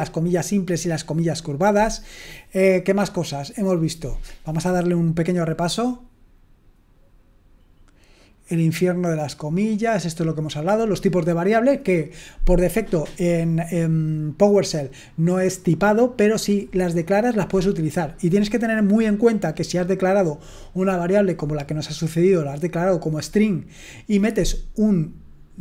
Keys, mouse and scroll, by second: 9.6-10.3 scroll up 1, 10.3-25.6 scroll up 1.